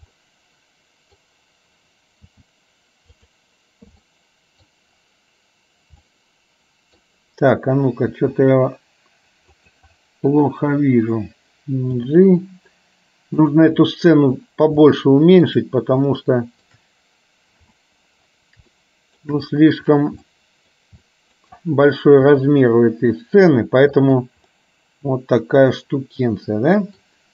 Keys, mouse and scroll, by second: 0.3 middle click, 2.4 g, 4.2 middle click, 6.2 middle click, 8.2 s, 12.0 g, 14.9 shift+middle click, 16.2 shift+middle click, 17.7 KP_7, 18.9 shift+middle click, 20.4 shift+middle click, 21.2 shift+middle click, 22.4 r, 24.7-27.2 middle drag.